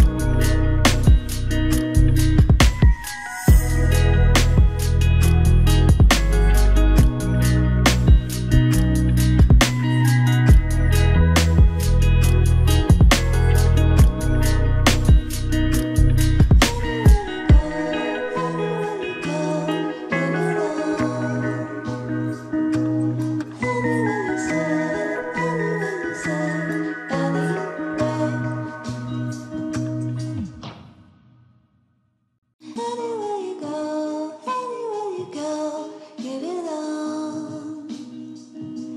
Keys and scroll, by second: 3.5 ctrl+=, 21.8 ctrl+j.